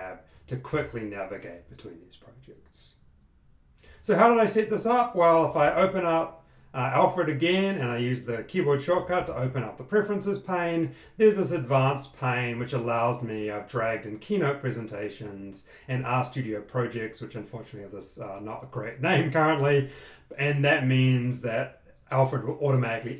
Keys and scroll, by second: 1.1 super+Tab, 5.3 ctrl+space, 8.9 super+,.